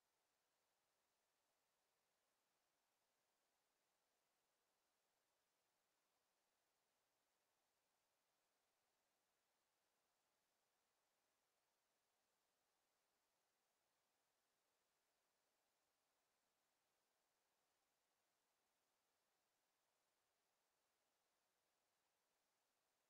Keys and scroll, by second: 14.4 space.